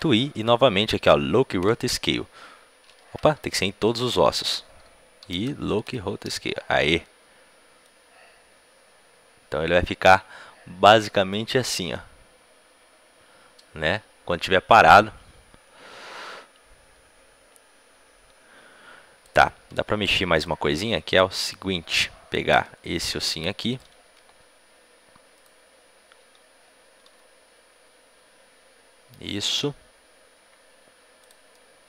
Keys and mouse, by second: 1.6 i, 2.9 ctrl+z, 3.6 a, 3.7 a, 5.8 i, 7.8-9.5 drag, 20.4-22.6 drag, 22.6-23.6 middle drag, 23.6-27.1 right drag, 26.9 g, 31.5-31.8 drag.